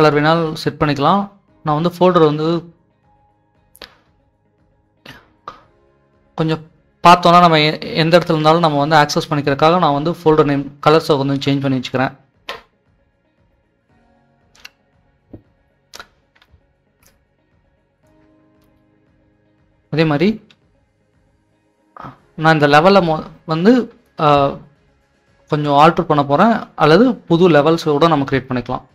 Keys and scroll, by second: 17.3 ctrl+s.